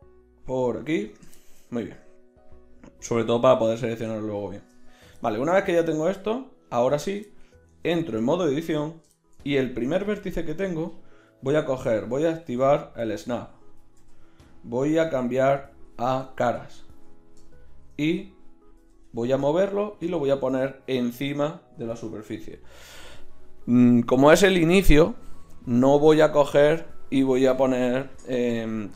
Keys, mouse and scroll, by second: 1.1 click, 1.9 Tab, 6.1-7.2 drag, 7.7 Tab, 12.5 shift+Tab, 14.0 n, 18.9 g.